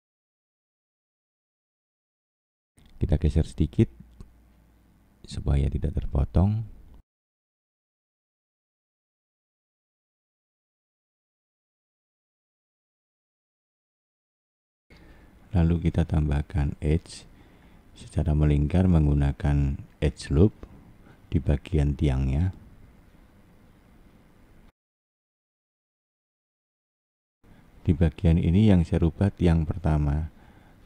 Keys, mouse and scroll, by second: 0.6 click, 3.4 click, 3.7 click, 7.5 middle click, 8.1 scroll down 4, 8.7 middle click, 9.1 scroll down 4, 10.5 alt+middle click, 14.9 click, 16.5 click, 21.7 click, 23.0-23.7 scroll up 1, 23.7-24.8 scroll up 1, 24.8 click, 27.4 middle click, 30.0 click, 30.6-30.8 scroll up 1.